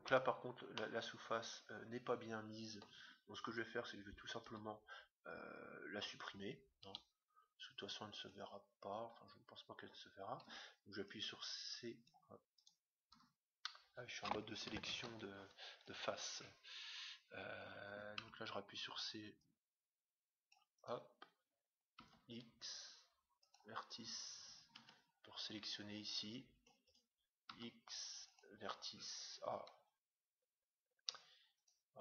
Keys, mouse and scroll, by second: 0.1 Tab, 1.8 middle click, 3.5-5.2 right drag, 4.4 a, 6.7 b, 10.4 c, 14.9 ctrl+Tab, 16.8-18.6 right drag, 18.1 c, 20.8-22.7 right drag, 21.9 x, 24.7 c, 27.4 x, 30.3 middle click, 30.8-31.6 scroll down 1, 31.6 middle click, 31.6-32.0 right drag.